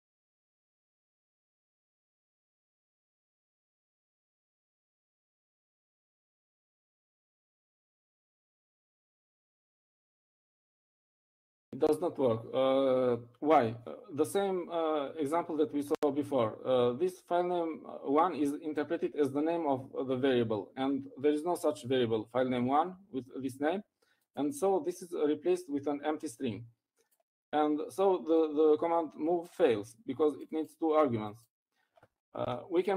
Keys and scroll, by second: 1.0-1.9 typing, 7.9-9.4 typing.